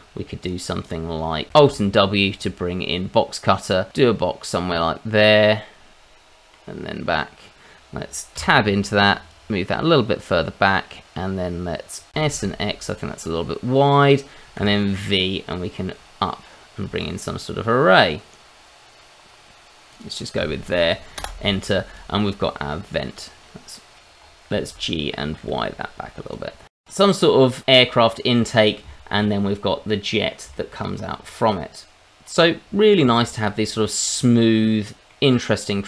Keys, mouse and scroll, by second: 0.4 click, 0.8 click, 1.6 alt+w, 3.9 click, 5.4 middle click, 8.4 Tab, 9.3 click, 10.5 middle click, 12.1 s, 12.3 x, 14.0 click, 14.5 v, 15.7-17.0 scroll up 4, 17.0-18.4 scroll up 2, 19.9 click, 20.1-21.1 scroll down 1, 21.1 Return, 21.1-21.8 scroll down 1, 21.8 click, 22.1 middle click, 22.8 scroll up 1, 23.0 click, 23.4 middle click, 23.9 Escape, 24.2-24.5 scroll up 2, 24.5 g, 25.4 y, 26.2 click, 26.4 scroll down 2, 26.6 click, 26.8 middle click, 28.2 scroll up 1, 28.4 middle click, 29.0 middle click, 29.8 middle click, 30.5 middle click, 30.9 shift+middle click, 31.0 shift+middle click, 31.8 shift+middle click, 31.9-32.6 scroll up 1, 32.6 middle click, 32.9 scroll down 2, 33.1 shift+middle click, 33.3 scroll up 1, 33.5 middle click, 34.4 middle click.